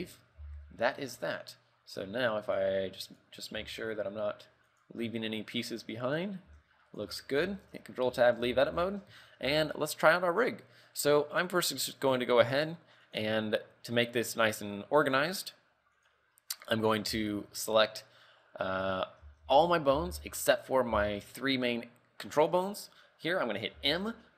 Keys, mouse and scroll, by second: 0.0 scroll up 4, 0.5 z, 2.9 right click, 3.5 right click, 3.9 r, 5.2-5.6 scroll down 3, 5.4 middle click, 6.0 middle click, 7.4 right click, 7.5 shift+middle click, 7.6 shift+middle click, 8.0 ctrl+Tab, 8.2 KP_3, 8.6 z, 9.0 shift+middle click, 9.3 a, 9.6 a, 9.8 right click, 10.4 scroll down 1, 12.2 click, 13.2 click, 14.1 click, 14.5 click, 15.3 click, 15.5 click, 16.1 click, 17.3 z, 19.4 a, 19.6 a, 20.1 b, 21.1 b, 23.9 m.